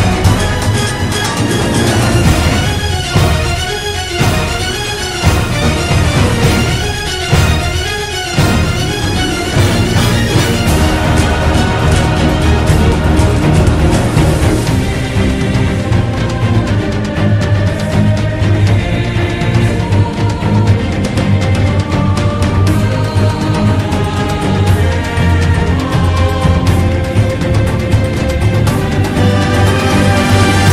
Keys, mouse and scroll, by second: 1.0 ctrl+-, 1.1 ctrl+=, 2.3 right click, 3.3 ctrl+=, 9.1 ctrl+-, 9.3 ctrl+=, 9.6 ctrl+-, 10.2 right click, 11.1 ctrl+=, 20.9 ctrl+z, 23.1 ctrl+-, 23.8 ctrl+=, 26.4 ctrl+-, 26.5 ctrl+=.